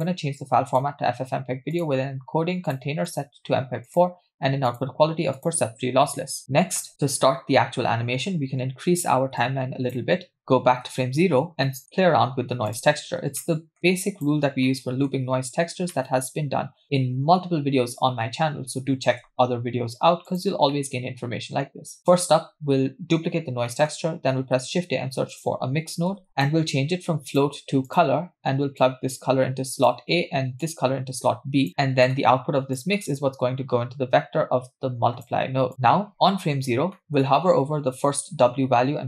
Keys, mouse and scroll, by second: 1.1-1.7 scroll down 1, 1.7-2.6 scroll down 2, 1.7 click, 2.6 scroll down 1, 2.7 click, 3.1-4.1 drag, 4.7-5.6 drag, 6.4 middle click, 6.4-6.9 scroll down 2, 9.4 click, 10.9 Left, 11.7 middle click, 11.9-12.7 scroll up 5, 12.7 click, 13.1-13.4 scroll down 2, 13.4 middle click, 13.8 click, 14.5 scroll down 1, 14.6 middle click, 15.8 scroll down 1, 15.9 middle click, 19.0 shift+d, 20.8-22.0 middle drag, 22.0-22.7 scroll up 2, 23.4 scroll down 2, 23.7 middle click, 24.4 shift+a, 26.7-27.3 scroll up 2, 27.3-28.1 drag, 28.8-29.9 drag, 30.6-31.7 drag, 31.8 middle click, 32.8-35.5 drag, 35.7 middle click, 37.0 middle click.